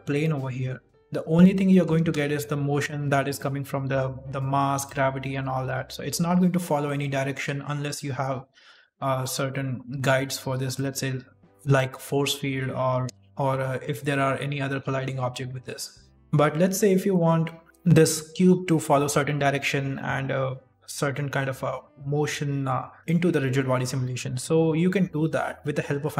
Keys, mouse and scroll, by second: 0.4 middle click, 1.3 click, 1.6 middle click, 1.9 shift+space, 3.1 shift+space, 3.3 middle click, 3.6 right click, 4.7 click, 5.3 r, 5.9 middle click, 6.4 r, 7.1 middle click, 7.4 r, 8.1 middle click, 8.6 g, 9.4 middle click, 9.8 right click, 10.3 s, 11.6 click, 12.1 middle click, 12.7 shift+middle click, 13.2 right click, 13.4 middle click, 15.2 middle click, 16.1 scroll down 1, 23.0 middle click.